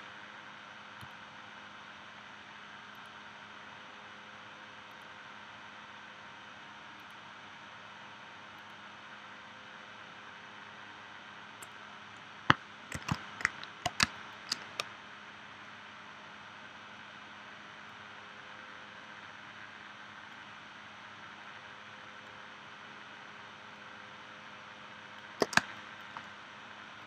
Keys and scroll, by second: 12.9 shift+c, 14.0 space, 25.6 space.